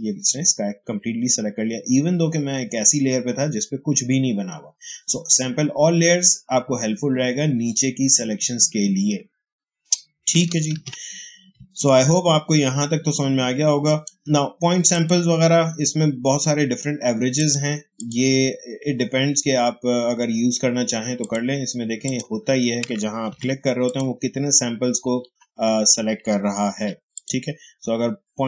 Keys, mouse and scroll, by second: 10.6 ctrl+d, 11.5 space, 11.7 click, 11.9 space, 14.8 click, 17.3 click, 21.1 click, 21.2 click, 23.2 ctrl+d, 23.7 click, 25.3 ctrl+d, 27.0 click, 27.1 click.